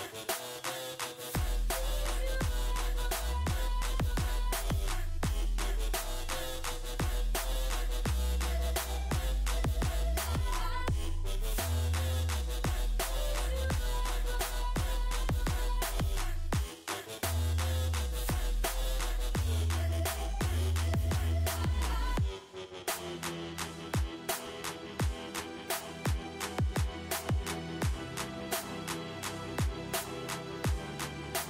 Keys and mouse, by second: 0.5 w, 5.6-9.6 drag, 5.6 f, 6.0 z, 8.6 s, 11.6 click, 11.6 g, 17.4 ctrl+r, 19.6 click, 19.6 g, 21.2-26.3 drag, 21.2 g, 23.2 g, 27.9 e.